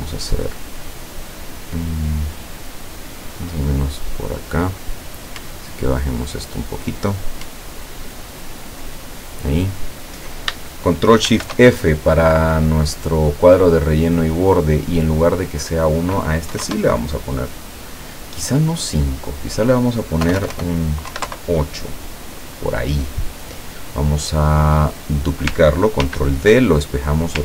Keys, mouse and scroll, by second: 3.4-4.8 drag, 5.7-7.0 ctrl+drag, 7.7-8.9 ctrl+drag, 9.1-9.9 ctrl+scroll down 2, 11.3 ctrl+shift+f, 15.0 click, 16.5 KP_5, 16.7 KP_Enter, 19.0 click, 20.3 BackSpace, 21.1 KP_8, 21.3 KP_Enter, 23.1 click, 25.0 click, 26.1 ctrl+d, 27.0 ctrl+click.